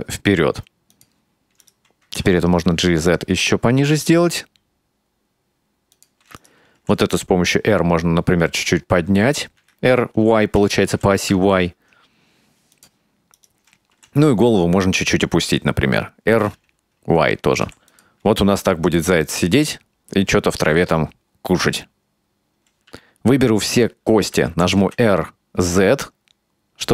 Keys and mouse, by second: 1.7 right click, 2.7 g, 6.5 right click, 6.8 r, 13.4 right click, 14.0 r, 19.3-22.6 middle drag, 23.0 a, 24.6 r.